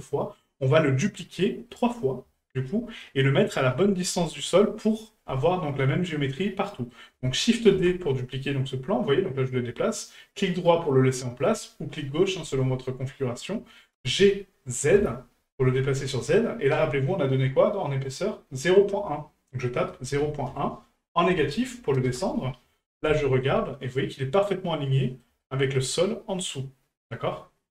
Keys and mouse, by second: 0.0-0.4 middle drag, 0.6-1.2 middle drag, 1.7-2.0 middle drag, 2.3 shift+middle drag, 3.0 middle click, 5.4 middle click, 6.7 middle click, 23.2 shift+middle click, 23.7 middle click, 24.9 middle drag, 25.4 shift+middle drag.